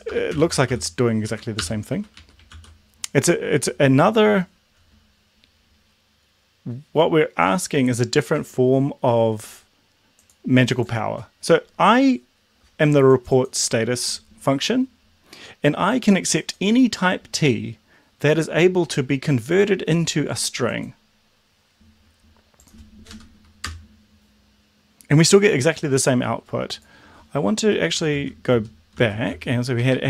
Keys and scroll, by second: 0.0-1.6 typing, 1.2 Right, 1.9 Right, 2.2 Right, 2.5 ctrl+s, 23.2 Up, 23.7 Return, 28.0 Up, 28.2 ctrl+z, 29.8 Up.